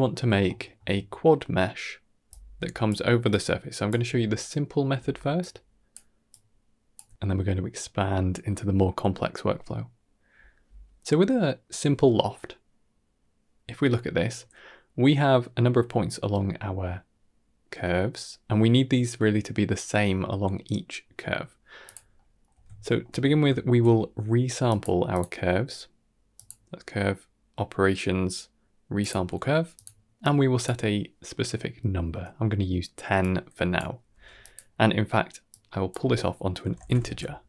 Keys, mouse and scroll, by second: 0.3-0.6 shift+middle drag, 2.1-9.4 typing, 2.2 click, 3.2 click, 5.3 click, 6.2 click, 7.7 click, 8.7 click, 9.8 click, 10.5-11.8 typing, 11.1 click, 21.7 click, 22.0-22.3 middle drag, 22.6 ctrl+middle click, 23.0 middle click, 23.5 shift+a, 30.1 click, 33.1-33.6 drag, 34.0 g, 35.4-37.4 drag.